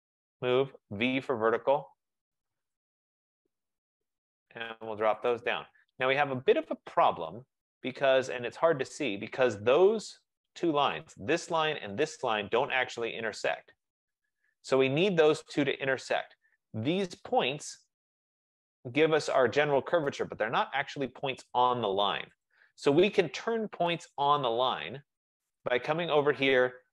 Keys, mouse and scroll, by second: 0.3-1.2 typing, 3.0 click, 4.1-4.8 typing, 5.4 click, 6.0-6.8 typing, 8.2 F15, 9.9 right click, 11.0 click, 12.1 shift+click, 16.1 right click, 16.7 middle click, 16.8 middle click, 22.6 click, 24.6 click.